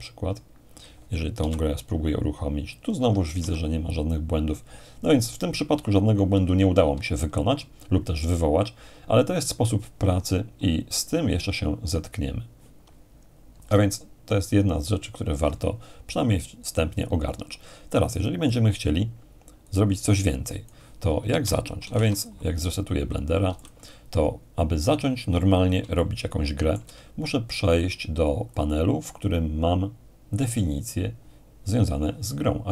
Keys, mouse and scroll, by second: 1.4 p, 3.4 Escape, 13.8-16.3 alt+drag, 17.0-19.4 drag, 19.7-21.6 drag, 21.8 ctrl+n, 22.2-23.2 ctrl+drag, 23.5 x, 23.6-25.8 drag, 26.0-27.8 shift+middle drag, 28.5-31.3 drag.